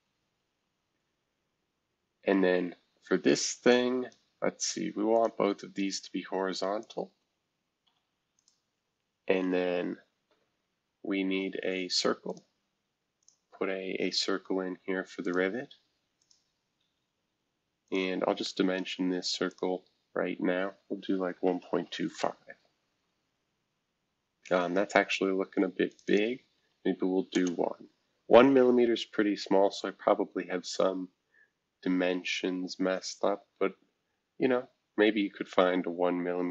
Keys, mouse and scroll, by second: 0.5-1.1 scroll up 1, 1.1-1.8 scroll down 1, 1.8 scroll up 2, 2.6 scroll up 4, 3.6 click, 5.1 click, 6.8 shift+click, 8.3 click, 12.3 click, 13.2 click, 15.2 click, 16.2 click, 16.8 Escape, 17.8-19.4 drag, 19.5-21.3 drag, 21.1-22.2 typing, 25.9 click, 26.0 click, 27.3 typing, 30.4-31.5 scroll down 2, 34.0-36.5 scroll up 4.